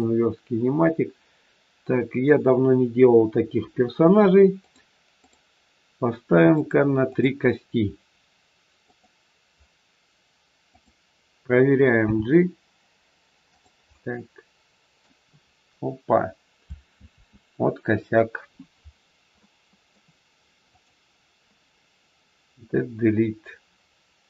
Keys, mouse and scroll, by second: 4.6 click, 5.2 click, 8.9 click, 11.9 g, 13.8 scroll up 1, 13.9 middle click, 16.9 ctrl+z, 18.9-19.4 scroll down 2, 19.4 middle click, 20.7 click, 22.4 click.